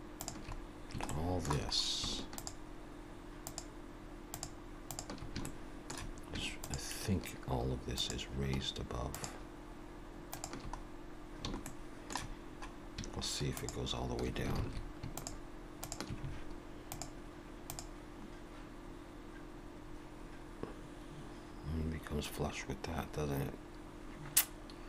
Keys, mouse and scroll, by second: 0.6-0.9 scroll down 2, 1.1 shift+middle click, 2.4 shift+click, 5.2 shift+click, 5.4 shift+middle click, 6.5 shift+click, 10.8 scroll down 2, 11.7 shift+middle click, 12.5-13.0 scroll up 2.